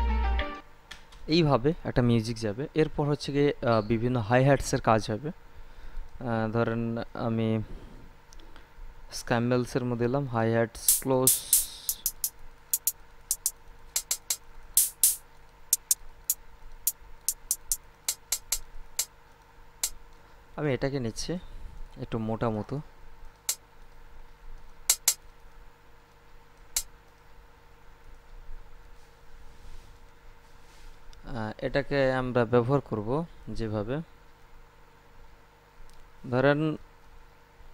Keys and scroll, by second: 0.7 space.